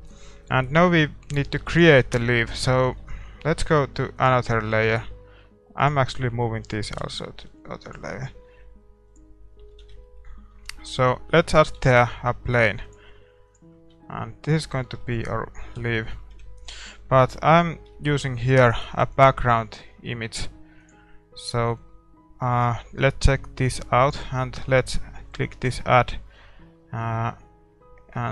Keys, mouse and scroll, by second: 0.4 ctrl+s, 0.4-5.8 middle drag, 1.4 a, 2.0 ctrl+s, 5.8-7.8 drag, 5.8-7.8 right drag, 7.8 m, 9.1-11.2 drag, 9.3-13.5 middle drag, 9.8 shift+c, 13.5 shift+a, 13.7 scroll down 1, 13.9-24.1 middle drag, 15.7 KP_7, 16.3 KP_5, 20.8-28.3 drag.